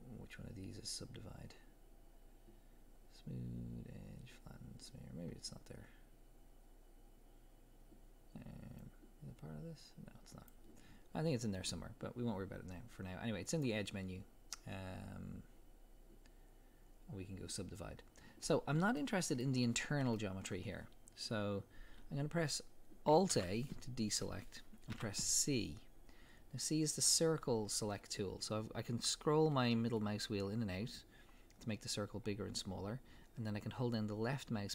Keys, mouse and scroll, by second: 8.8-19.0 drag, 19.0-23.4 middle drag, 23.3 alt+a, 24.9 c.